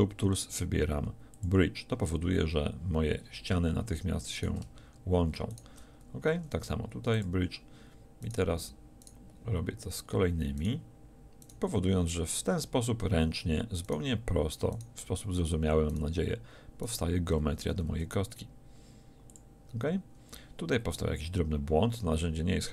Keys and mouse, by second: 6.3 w, 17.7 w, 20.9-22.7 middle drag.